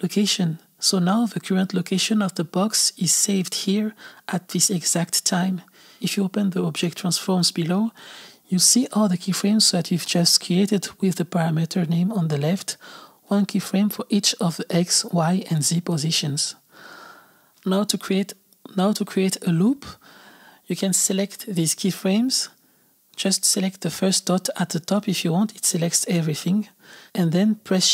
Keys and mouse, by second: 8.3 click, 18.9 click, 19.6 click, 23.5 click, 25.1 click.